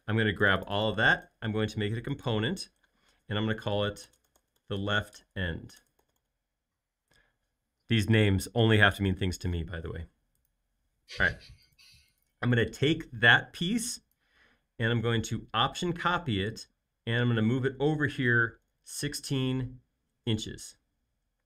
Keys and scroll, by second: 4.0-6.0 typing, 13.2 m, 18.3-19.9 typing.